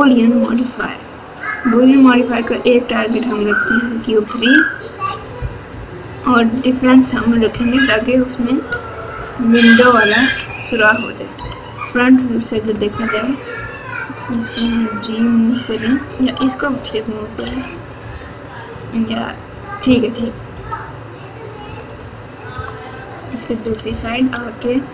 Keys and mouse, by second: 2.4 click, 5.7 KP_4, 7.1-9.1 typing, 10.2-11.3 typing, 12.5 KP_Add, 12.7 KP_Add, 12.8 KP_Add, 14.6 g, 17.4 g, 20.5 KP_8, 21.6 KP_Subtract, 21.8 KP_Subtract, 22.0 KP_Subtract, 22.5 KP_9, 23.6 KP_Subtract, 23.8 KP_Subtract, 24.0 KP_Subtract.